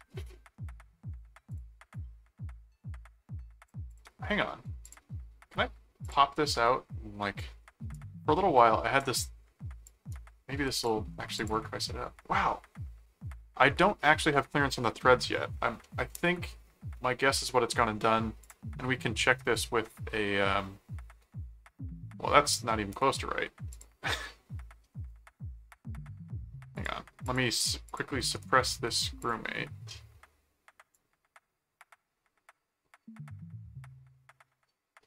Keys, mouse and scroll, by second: 1.5-3.7 drag, 3.9 click, 4.8 click, 6.0 click, 7.4-9.0 drag, 7.9 right click, 9.9 click, 10.1 right click, 11.4 click, 15.8-17.7 middle drag, 18.4 click, 19.5 click, 20.5-21.6 middle drag, 22.4 click, 23.7 click, 25.5 middle click, 26.7 click, 27.9 click, 28.3 right click, 29.2 click, 30.9-35.0 drag.